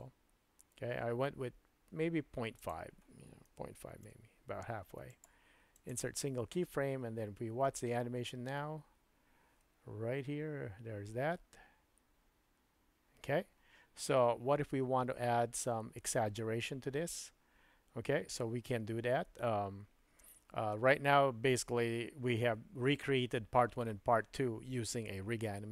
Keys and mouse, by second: 2.7-5.9 drag, 5.2 right click, 7.6 space.